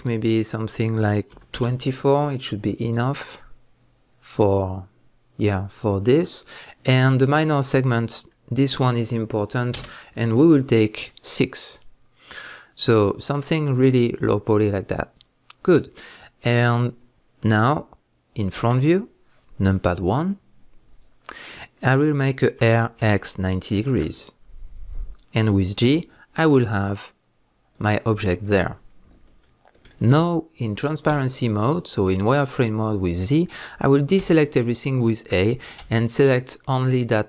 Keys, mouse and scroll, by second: 7.2-11.1 drag, 20.9 click, 22.6 r, 25.2 click, 25.8 g, 27.8 click, 29.4-37.2 shift+middle drag, 31.1 z.